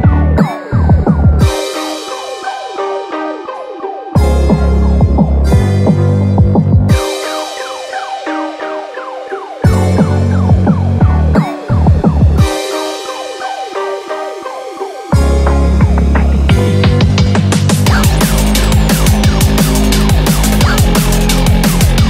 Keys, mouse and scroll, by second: 0.0 click, 1.2 scroll down 1, 1.7 middle click, 2.4 scroll down 2, 2.6 middle click, 5.5 e.